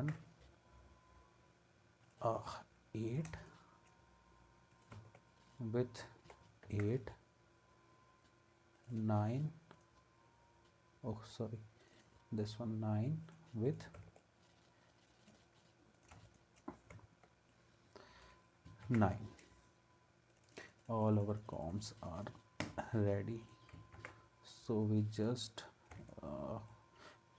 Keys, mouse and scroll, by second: 0.0 ctrl+s, 3.4 shift+click, 4.7 click, 5.2 alt+right click, 6.7 ctrl+s, 18.8 ctrl+s, 24.0 ctrl+s.